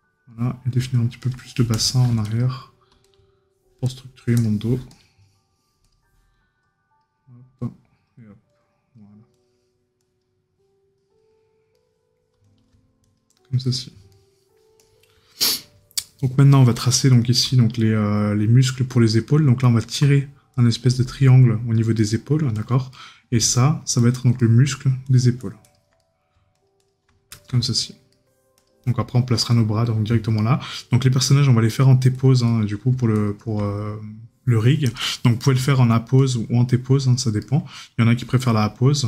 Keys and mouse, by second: 11.7 right click, 14.1 right click, 15.4 right click, 17.0 right click, 22.0 right click, 24.4 right click, 26.0 right click, 27.6 right click, 32.5 right click, 37.4 right click.